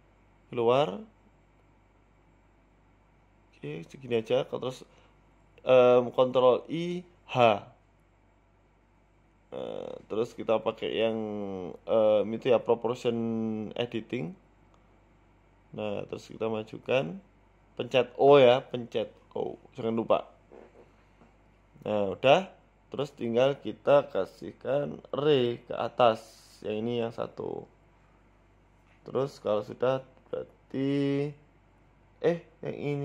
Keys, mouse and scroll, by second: 0.8 e, 5.8 ctrl+i, 6.4 h, 7.6 click, 8.1 KP_7, 9.0 click, 9.7 click, 10.7 p, 11.7 o, 12.5 g, 18.4 middle click, 19.2 alt+h, 19.8 z, 20.3-20.7 scroll down 5, 20.6 middle click, 21.1 middle click, 21.5-21.8 scroll up 3, 21.7 middle click, 22.4-22.8 scroll down 6, 22.6 Tab, 22.9 middle click, 23.7 KP_1, 25.0 click, 25.5 click, 25.7 click, 27.3 click, 27.9 Tab, 29.1 click, 30.0 z, 30.8-31.2 scroll up 1, 31.5 click, 32.2 click.